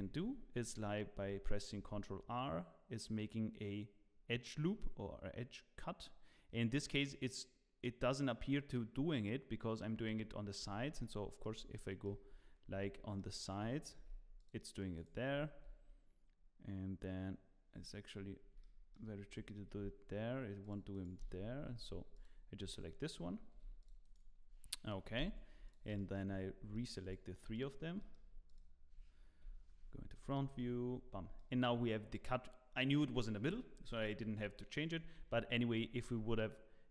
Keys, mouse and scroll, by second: 0.2 z, 1.7 ctrl+r, 12.2 shift+middle click, 12.2 scroll down 2, 12.8 z, 13.9 ctrl+r, 15.5 ctrl+r, 18.6 middle click, 19.7 ctrl+r, 21.2 Escape, 21.8 Tab, 22.1 click, 22.6 Tab, 23.5 ctrl+r, 25.3 Tab, 25.7 shift+click, 25.9 middle click, 26.9 middle click, 27.0 click, 27.5 shift+click, 28.0 middle click, 29.4 KP_1, 30.1 scroll up 2, 30.6 z, 31.0 scroll up 2, 31.3 shift+middle click, 35.1 1, 36.0 Tab.